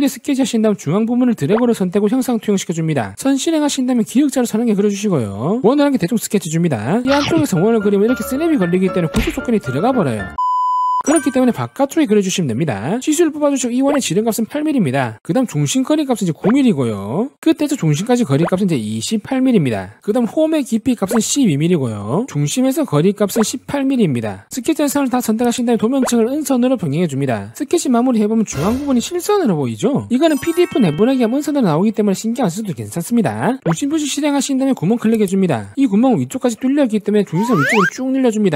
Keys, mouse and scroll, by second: 0.1 click, 1.6 click, 2.6 click, 3.4 click, 4.4 click, 5.8 click, 6.5 click, 7.3 2, 8.7 click, 13.1 d, 13.4 click, 13.9 click, 14.6 click, 15.3 click, 15.9 click, 16.5 click, 17.1 click, 17.5 click, 18.1 click, 18.4 click, 19.3 click, 20.2 click, 20.8 click, 21.1 click, 21.3-22.2 typing, 21.9 click, 22.4 click, 23.0 click, 23.4 click, 24.2 click, 24.6 click, 25.3 shift+click, 26.2 click, 27.4 click, 34.8 click, 35.7 click, 36.2 click, 36.5 scroll up 2, 36.7 middle click, 37.4 click.